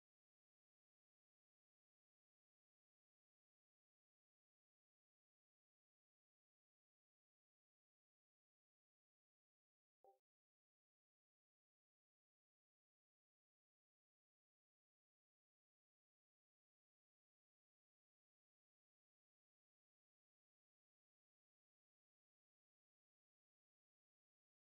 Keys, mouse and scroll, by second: 9.5-24.6 drag.